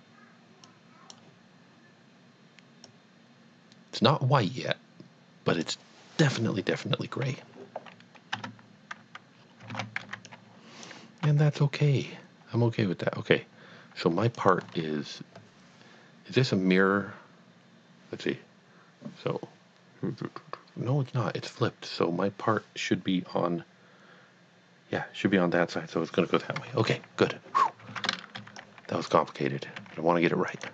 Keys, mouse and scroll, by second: 0.6 click, 2.8 click, 8.3 Tab, 9.4 scroll down 1, 9.7 alt+a, 10.1 b, 10.4 click, 11.3 g, 14.3 click, 28.0 a, 28.3 b, 28.7 click, 29.9 g, 30.6 click.